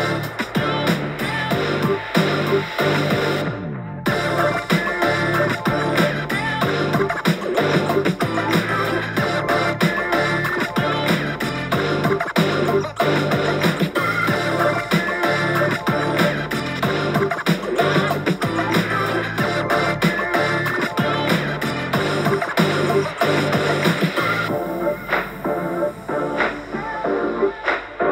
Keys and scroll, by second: 1.0 super+z, 1.3-1.7 typing, 4.7 x, 7.1 super+z, 9.6-9.9 typing, 11.8-12.4 typing, 17.9 super+t, 26.5 super+t.